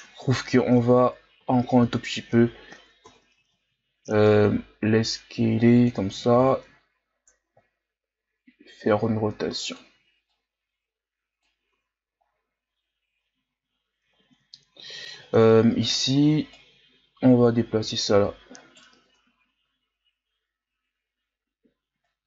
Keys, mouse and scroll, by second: 0.9 ctrl+KP_Add, 1.4 ctrl+KP_Add, 3.1 ctrl+KP_Add, 3.5 ctrl+KP_Subtract, 4.5 s, 6.3 r, 10.3-11.7 drag, 11.7 Tab, 12.3-14.3 scroll down 1, 14.3-15.9 ctrl+scroll up 9, 15.9 Tab, 16.5 right click, 19.1 Tab, 19.4-20.1 scroll down 4, 20.1-21.1 scroll up 4, 21.1 Tab, 22.1 right click.